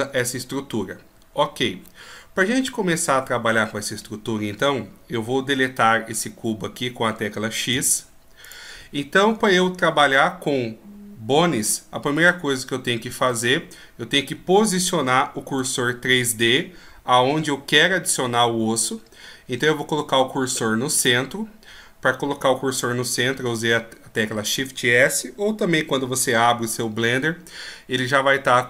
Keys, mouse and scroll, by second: 7.7 x, 15.9 shift+s.